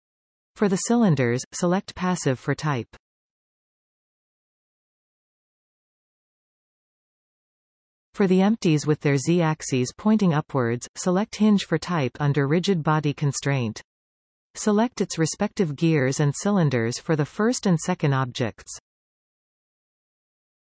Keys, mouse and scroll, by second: 2.9 click, 3.8-5.8 drag, 6.9 click, 7.8-10.3 drag, 11.8 click, 12.7-16.1 drag, 18.3 click, 20.2 click.